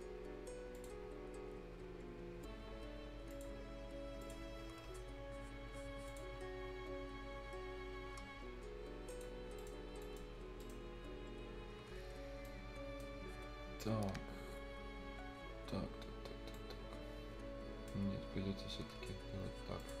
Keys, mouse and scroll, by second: 0.7 click, 1.0 scroll down 1, 1.5 scroll up 1, 3.3 click, 4.2 click, 4.5 scroll down 1, 4.7 scroll up 1, 6.3 scroll down 1, 6.5-7.1 scroll up 1, 9.1 click, 9.4 scroll down 1, 9.6 right click, 9.8 scroll up 1, 10.0 right click, 10.2 scroll down 1, 10.6 right click, 11.9-12.5 scroll down 1, 12.5 right click, 13.2 scroll down 1, 16.3 scroll up 1, 16.5-18.1 right drag, 18.1 scroll up 1, 19.8 click.